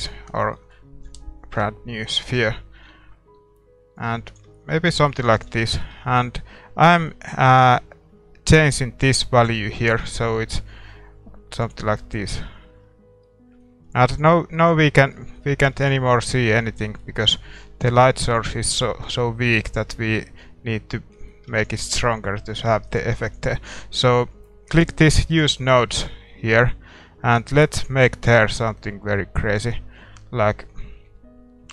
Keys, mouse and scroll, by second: 1.5 KP_4, 2.3 KP_1, 3.4 g, 4.5-7.8 middle drag, 5.7 ctrl+s, 7.8-9.6 drag, 12.0-13.2 scroll up 1, 12.4 shift+z, 13.2-14.8 middle drag, 15.9 ctrl+s, 21.5 ctrl+s, 22.8-29.7 drag, 25.4 ctrl+s.